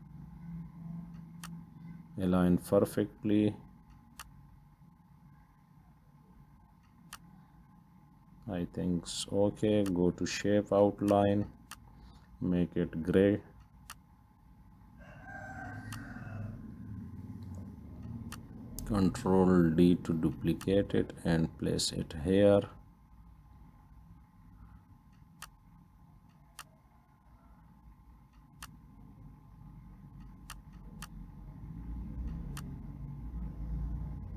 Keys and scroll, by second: 19.4 ctrl+d.